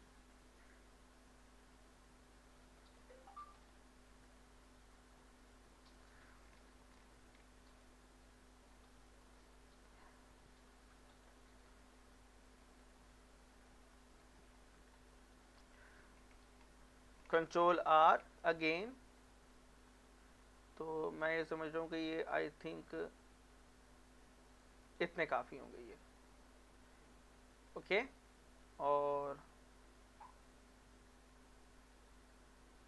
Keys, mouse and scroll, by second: 0.3-3.3 drag, 3.3 middle click, 3.6 scroll up 1, 4.4 shift+middle click, 5.5-6.9 drag, 6.9 ctrl+r, 7.7 click, 7.9 click, 11.1 click, 11.5 middle click, 12.8 scroll up 1, 13.0-17.8 middle drag, 17.8 ctrl+r, 18.8-19.2 scroll up 2, 22.3 scroll down 1, 23.5-24.5 scroll up 1, 24.5 click, 24.7 click, 24.8 right click, 25.4 middle click, 26.4 scroll up 1, 26.6 middle click, 27.3 scroll up 1, 27.5 middle click, 28.0 shift+middle click, 28.3 scroll up 1, 29.1 middle click.